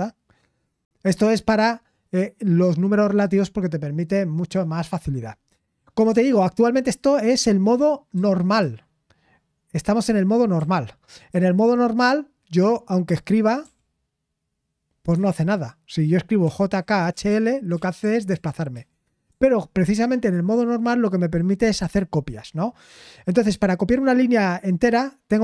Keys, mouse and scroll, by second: 2.1-2.8 typing, 6.0 typing, 9.2 typing, 10.6-11.2 typing, 13.6 typing, 15.1 Escape, 16.1-19.2 typing.